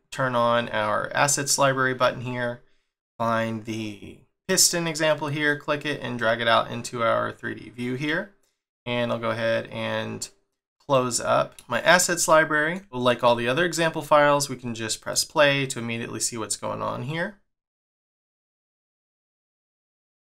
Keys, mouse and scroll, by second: 1.4-1.8 scroll down 1, 2.2-4.0 scroll up 1, 4.0 scroll down 1, 4.5-5.5 scroll up 1, 5.5 click.